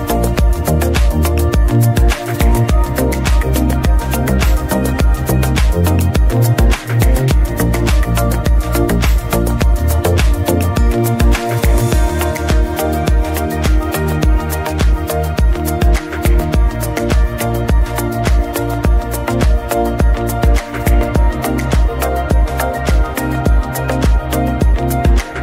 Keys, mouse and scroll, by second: 2.7 ctrl+shift+click, 4.0-4.4 scroll up 1, 4.4-6.4 middle drag, 6.4 ctrl+shift+click, 7.7 alt+click, 9.0 x, 9.2-9.8 scroll down 1, 9.8-10.5 scroll down 1, 10.5-11.1 scroll down 1, 11.1 x, 11.4 click, 11.6 x, 11.7 scroll down 1, 13.1 x, 13.2-13.8 scroll down 1, 14.7 ctrl+shift+click, 16.4-17.1 scroll up 2, 17.1 middle click, 17.4 scroll down 2, 17.6-18.1 middle drag, 18.1 scroll up 2, 18.2 scroll down 2, 18.4-19.0 middle drag, 19.0-19.5 scroll up 2, 19.5 alt+a, 19.8-20.3 scroll down 2, 20.3-20.7 middle drag, 20.7-22.3 scroll up 4, 21.1-21.5 shift+middle drag, 22.3-22.7 middle drag, 22.7 scroll up 2, 22.9-23.5 shift+middle drag, 23.5-24.0 scroll up 2, 24.0-25.4 middle drag.